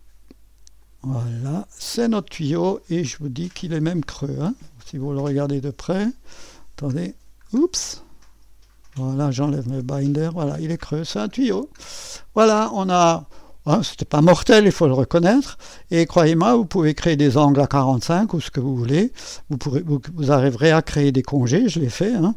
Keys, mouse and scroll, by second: 0.8 click, 1.8 click, 3.6 click, 4.1-5.7 drag, 7.8 click, 8.4 click, 9.8 click, 9.8 space, 11.7 scroll down 1, 12.2-22.3 drag.